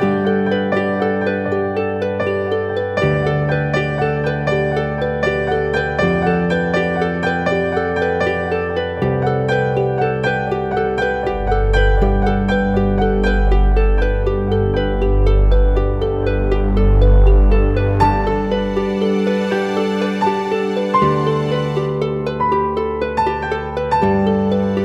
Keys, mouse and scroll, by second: 6.3 ctrl+t, 12.2 Up, 12.5 Up, 13.6 Return, 14.1 Right, 14.9 Right, 15.3 Left, 15.5 Left.